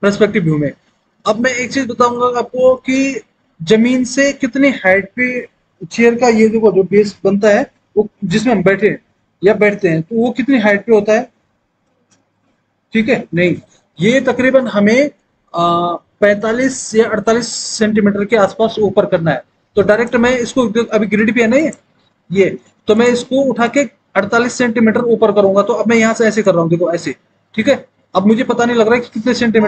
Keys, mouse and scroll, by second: 20.0 click, 20.7 middle click, 21.7 click, 23.7 click.